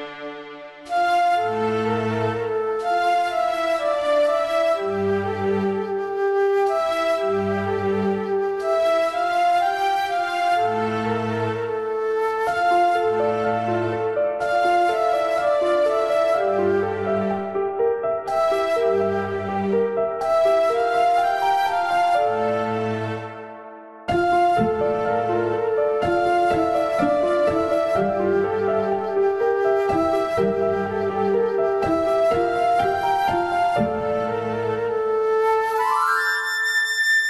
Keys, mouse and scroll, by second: 0.7 click, 1.6 click, 2.4 click, 2.5 click, 3.0 click, 3.8 click, 4.8 click, 5.7 click, 6.1 click, 6.8 click, 9.0 click, 10.2 click, 10.9 click, 11.7 click, 12.5 click, 13.3 click, 14.5 click, 16.1 click, 16.8 a, 16.9 a, 17.0 a, 17.5 click, 21.3 click, 21.5 click, 22.0 click, 22.6 click, 23.3 click, 24.8 KP_1, 25.5 r, 26.8 click, 29.0 click, 30.8 click, 31.9 click, 33.2 g, 33.6 g, 36.4 click.